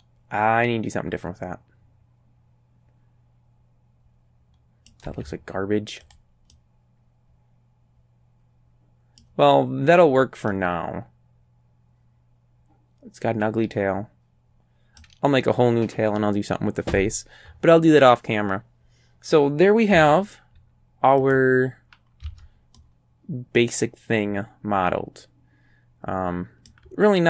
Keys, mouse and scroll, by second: 5.1 z, 6.1 click, 6.5-9.4 drag, 10.5-15.2 middle drag, 20.0 Tab, 21.3 click, 22.3 a, 22.8-26.9 drag.